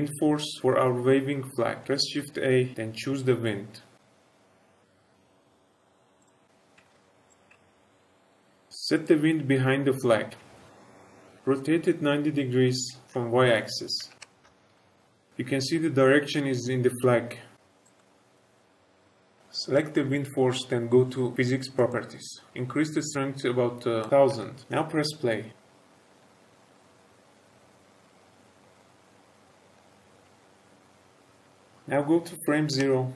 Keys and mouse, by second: 1.9 shift+a, 6.7 g, 6.8 shift+z, 7.2 click, 7.4 g, 7.6 z, 10.5-10.8 middle drag, 11.6 r, 13.0 y, 13.9 KP_9, 14.1 KP_0, 14.4 Return, 14.7 shift+middle drag, 17.5 z, 17.5 s, 17.9 middle click, 21.7 click, 23.9 click, 25.3 space, 29.4 space, 30.0 space, 31.7-33.1 drag.